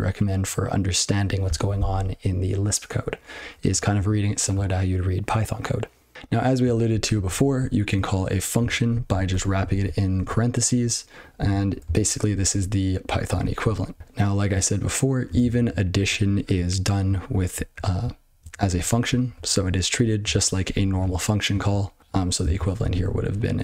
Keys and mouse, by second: 3.9 ctrl+n, 6.8 ctrl+n, 7.0 ctrl+n, 7.2 ctrl+n, 7.5-7.9 ctrl+f, 8.5 ctrl+a, 8.8 ctrl+f, 9.2 Tab, 9.6 ctrl+f, 10.1 ctrl+e, 10.6 ctrl+p, 11.3 ctrl+a, 11.8 ctrl+space, 11.8 ctrl+n, 12.2 ctrl+g, 12.4 ctrl+p, 13.0 ctrl+f, 13.2 ctrl+f, 13.3 ctrl+f, 13.5 ctrl+f, 13.9 ctrl+n, 15.2 ctrl+a, 15.3 ctrl+space, 15.5 ctrl+n, 15.9 ctrl+g, 16.2 ctrl+p, 17.3 ctrl+f, 17.4 ctrl+f, 17.7-18.0 ctrl+f, 18.3 ctrl+n, 18.6 ctrl+a, 19.0 ctrl+f, 19.3 ctrl+f, 19.5 ctrl+f, 19.9 ctrl+b, 20.2 ctrl+alt+space, 20.6 ctrl+g, 21.6 ctrl+p, 21.8 ctrl+p, 22.0 ctrl+f, 22.4 ctrl+alt+space, 22.9 ctrl+w.